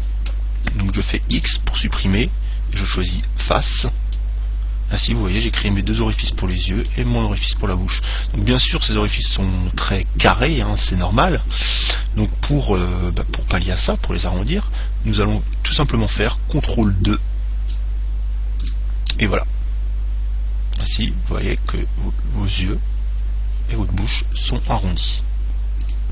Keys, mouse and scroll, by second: 1.6 x, 4.4-6.2 middle drag, 6.8-8.8 middle drag, 14.2 Tab, 17.7 ctrl+2, 19.3-21.1 middle drag.